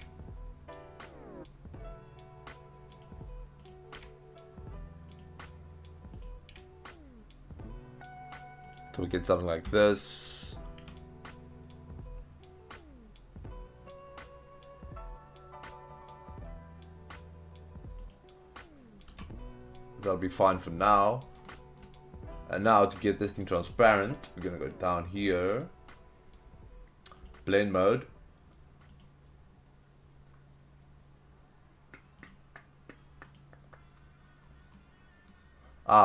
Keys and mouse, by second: 2.9 click, 3.6 click, 3.9 g, 5.1 click, 6.2 click, 6.5 g, 8.7 click, 10.8 a, 10.8 r, 18.0 click, 19.1 Tab, 20.4-21.2 middle drag, 21.5 shift+middle drag, 22.6 middle click, 27.4-29.4 drag, 32.4-33.4 drag, 34.8-35.3 middle drag.